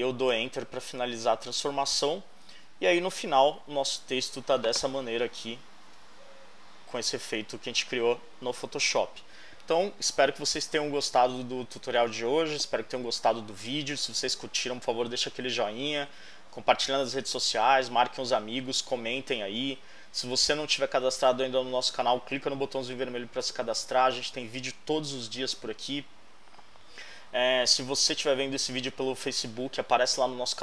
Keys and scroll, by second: 0.3 Return, 6.6 super+=.